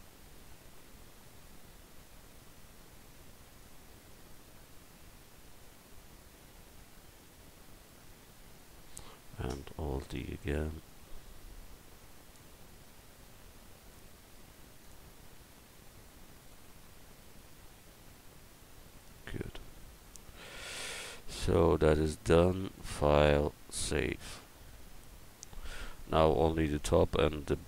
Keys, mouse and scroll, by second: 0.5-6.2 drag, 7.8 middle click, 10.0 alt+d, 19.3 middle click, 19.6 a, 20.8 middle click, 22.6-24.4 drag, 24.4-27.1 middle drag.